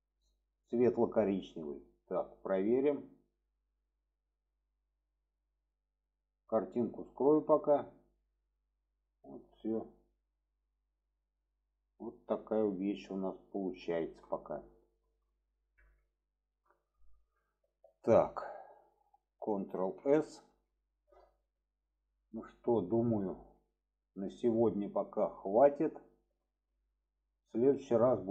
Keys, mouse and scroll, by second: 2.7 click, 3.7-4.7 middle drag, 5.4 middle click, 7.0 click, 7.8 click, 8.6 middle click, 9.3-11.0 middle drag, 12.4-13.5 middle drag, 13.9 shift+middle drag, 14.9 shift+middle click, 16.2 shift+middle click, 17.5 shift+middle click, 18.5-19.0 middle drag, 19.7 ctrl+s, 20.3 shift+middle click, 21.1-21.7 alt+middle drag, 24.1 shift+middle click, 26.4 shift+middle click, 28.2 click.